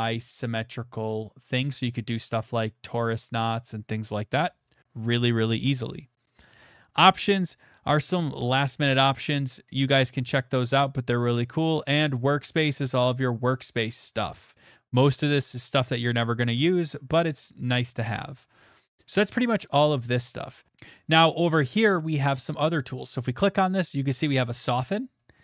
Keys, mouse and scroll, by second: 0.4 click, 4.7 middle click, 4.7 middle click, 5.4 scroll, 6.2 click, 6.5 scroll, 9.5 middle click, 11.1 click, 11.7 click, 11.7-12.0 scroll, 13.1 scroll, 13.8 scroll, 14.5 middle click, 16.1 click, 16.8 middle click, 17.8 click, 19.9 middle click, 20.7 middle click, 24.7 right click.